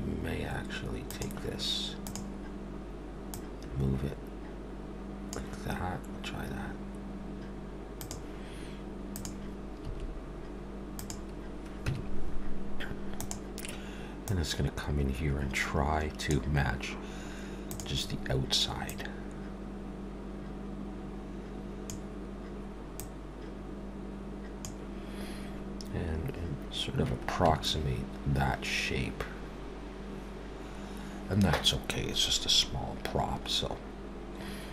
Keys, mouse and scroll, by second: 1.1 click, 2.0 click, 3.3 click, 7.9 click, 9.0 click, 9.8 s, 11.8 Tab, 13.2 click, 14.3 click, 17.7 click, 18.9 click, 23.0 click, 27.5 Tab, 34.0-34.7 scroll down 1.